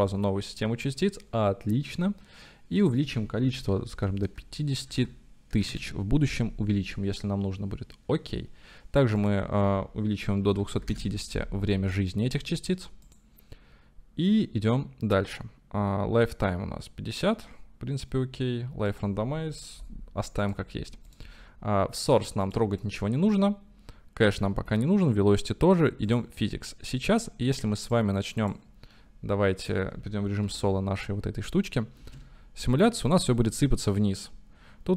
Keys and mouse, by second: 3.1-6.4 drag, 5.0 KP_0, 9.3-11.7 drag, 19.0-20.6 drag, 21.1 click, 22.4 click, 26.1 click, 28.0-28.6 drag, 30.4 KP_Divide, 32.0 space.